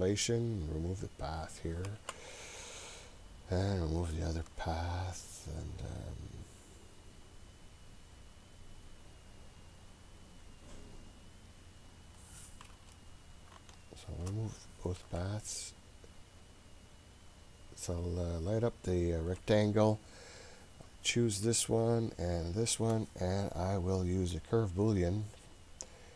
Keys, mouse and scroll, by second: 1.0 click, 2.5 Delete, 3.7 click, 5.1 Delete, 6.8 click, 7.7 click, 11.1 click, 13.8 shift+click, 15.0 Delete, 17.9 click, 18.7 click, 20.4 click, 22.4 shift+click, 24.4 click.